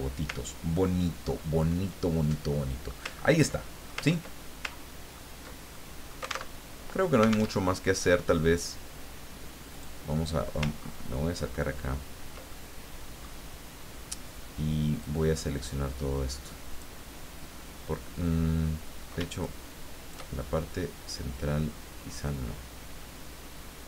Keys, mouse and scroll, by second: 0.6-1.3 ctrl+scroll down 1, 1.3 ctrl+click, 2.5 click, 3.1-3.5 ctrl+scroll up 1, 3.5 ctrl+click, 4.1 ctrl+scroll up 1, 4.8-5.3 ctrl+scroll down 4, 5.7 ctrl+middle click, 6.3 alt+click, 6.6 alt+Tab, 7.5 alt+Tab, 9.7 click, 10.7-11.3 ctrl+scroll up 1, 11.7-12.7 ctrl+scroll down 1, 12.7 ctrl+click, 15.1-17.0 drag, 19.4-20.9 shift+drag, 22.2-23.8 drag.